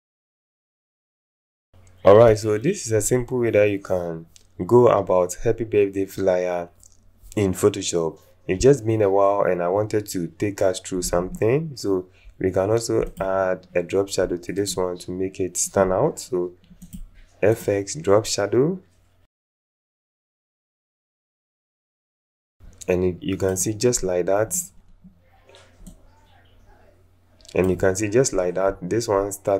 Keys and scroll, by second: 0.1 ctrl+alt+0.